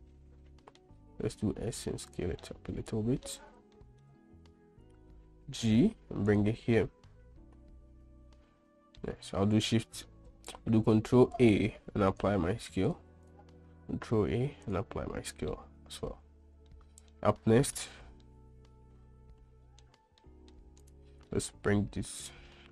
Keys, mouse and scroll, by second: 0.1-1.2 middle drag, 1.6 s, 2.8-3.6 middle drag, 3.6-4.1 scroll up 2, 4.1 shift+middle drag, 5.8 g, 7.2-9.5 middle drag, 10.0 shift+a, 11.6 shift+a, 14.2 ctrl+a, 15.9-16.3 middle drag, 15.9-16.2 scroll up 1, 17.1-17.6 shift+middle drag, 17.1-17.5 shift+scroll up 1, 18.6-20.2 middle drag, 18.6-19.0 scroll up 1, 20.2-20.9 scroll down 1, 21.2 click, 21.9 g.